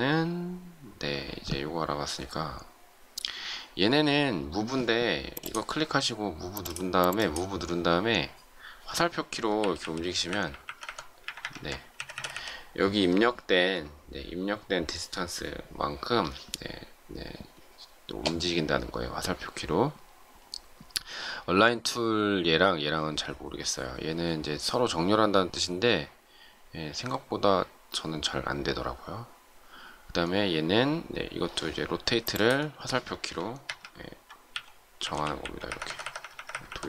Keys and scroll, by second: 9.6 Left, 34.4 Left.